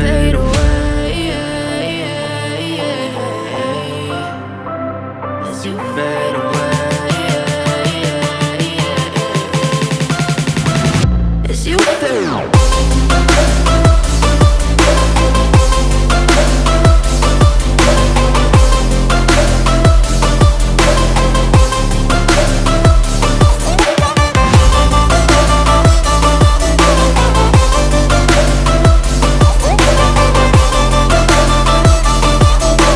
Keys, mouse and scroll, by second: 5.7-6.5 typing, 24.1-25.3 scroll down 1, 25.3 double click.